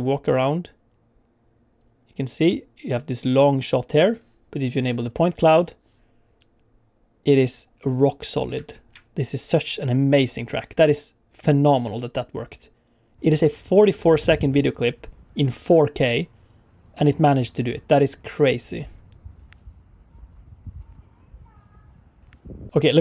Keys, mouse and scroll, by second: 5.5 click, 6.5 click, 8.7 alt+shift+z, 9.5 click.